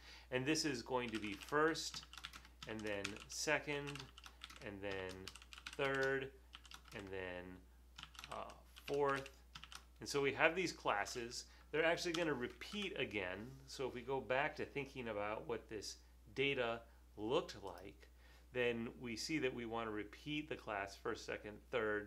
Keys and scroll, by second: 1.0-10.2 typing, 12.1-12.9 typing.